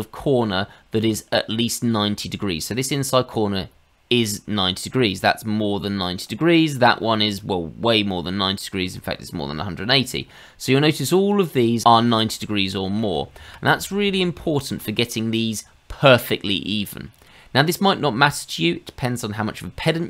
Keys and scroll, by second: 13.4 ctrl+z, 13.7 ctrl+z, 14.1 ctrl+z, 14.4 ctrl+z.